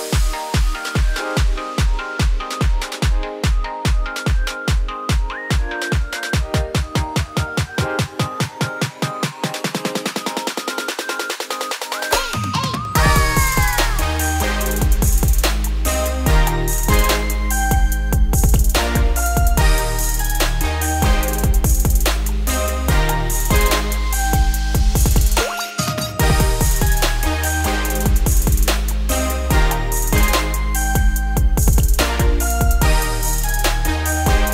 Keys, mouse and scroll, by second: 1.3 Tab, 1.9 Tab, 2.6 click, 3.2 scroll up 2, 3.3 z, 4.6 x, 5.1 click, 5.3 scroll down 2, 5.4 middle drag, 5.6 z, 6.7 scroll up 2, 6.9-8.3 scroll down 5, 8.3 g, 9.5-10.5 scroll up 9, 9.9 shift+middle drag, 10.5 Tab, 10.8 click, 11.2 3, 11.3 click, 11.7 shift+s, 12.0 Tab, 12.4 shift+a, 16.0-17.2 scroll down 5, 17.2 1, 17.7 e, 20.6 `, 21.1-21.9 scroll down 8, 21.9 shift+middle click, 22.1-22.6 scroll up 2, 22.6 g, 25.1-25.5 scroll up 3, 25.5 e, 28.7 scroll down 3, 28.9 middle click, 29.6 `, 30.4 `, 31.3-32.1 scroll up 2, 32.1 e.